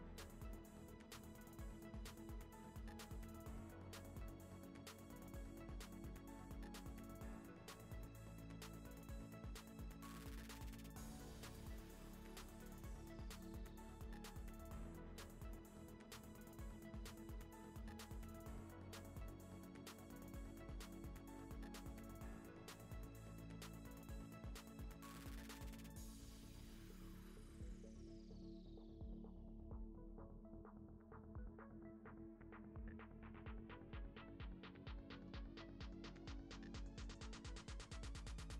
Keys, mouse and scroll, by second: 0.0 click, 0.2 KP_1, 0.4 KP_Decimal, 1.0 g, 2.0 middle click, 2.3 g, 2.8 KP_1, 3.1 r, 4.3 middle click, 4.7 g, 5.3 middle click, 5.7 scroll down 5, 5.8 middle click, 6.0 shift+middle click, 6.5 click, 7.3 click, 7.7 g, 9.2 g, 9.6 middle click, 9.7 alt+d, 10.2 middle click, 10.4 g, 12.3 middle click, 12.5 scroll up 1, 12.6-12.9 middle drag, 12.9 scroll down 4, 13.0-13.7 middle drag, 13.7 alt+d, 14.0 r, 14.6 alt+r, 15.9 scroll down 2, 16.0 click, 16.1 middle click, 16.3-16.8 scroll up 1, 16.8 click, 17.5 r, 18.1 ctrl+z, 18.3 r, 18.7 r, 20.3 g, 21.0 click, 21.2 shift+click, 21.4 shift+click, 21.5 shift+click, 21.8 shift+click, 22.3 s, 22.9 ., 23.4 s, 24.2 click, 24.8 ctrl+z, 25.0 click, 25.2 ctrl+z, 25.5 r, 26.4 click, 27.9 shift+click, 28.2 click, 28.4 shift+click, 28.6 shift+click, 29.1 s, 29.9 click, 30.3 scroll down 1, 30.4-31.7 shift+middle drag, 31.7-32.2 scroll up 1, 33.0 shift+right click, 33.1 shift+middle click, 33.3-35.7 typing, 34.1 Tab, 34.5 shift+middle click, 34.6 scroll up 1, 35.3 shift+middle click, 37.3 ctrl+r, 37.6 Tab, 37.7 ctrl+2, 37.8 Tab, 38.3 1, 38.4 click, 38.5 shift+click.